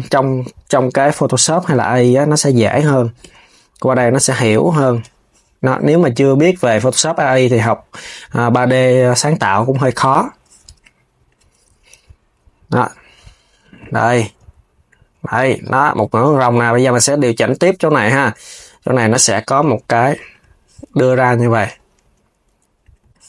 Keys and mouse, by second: 0.9 click, 1.3 KP_3, 2.9 g, 6.1 click, 6.4 KP_3, 6.8 g, 10.9 click, 11.2 KP_3, 11.6 g, 14.8 KP_3, 17.4 click, 18.0 KP_3, 18.7 g, 21.1 click, 21.3 KP_3, 21.7 g.